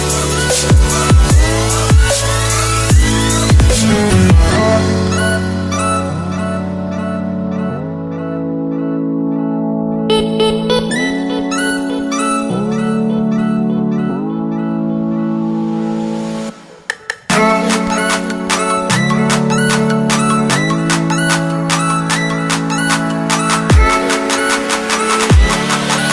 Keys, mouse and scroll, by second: 16.5-16.9 scroll down 1, 16.9 click, 18.1 alt+Tab, 21.3 click, 21.6 ctrl+c, 21.8 alt+Tab, 22.4 ctrl+v, 22.8 click, 25.5 alt+Tab, 26.0 click.